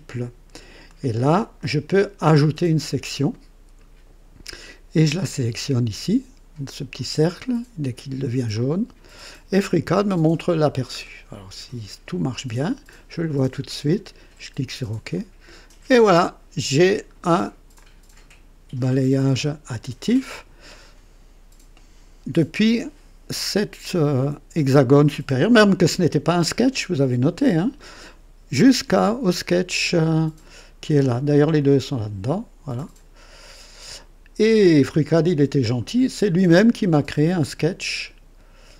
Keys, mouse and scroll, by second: 0.8-1.7 drag, 2.9 click, 8.5 click, 10.0 scroll up 2, 10.6 scroll down 2, 12.3 click, 13.9 click, 15.1-16.9 drag, 17.1 scroll down 2, 17.7-19.6 drag, 31.5 click, 32.7 click.